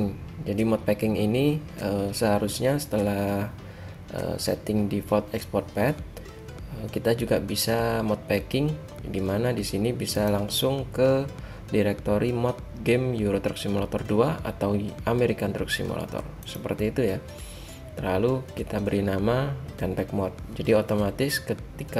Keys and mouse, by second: 10.3-16.4 drag.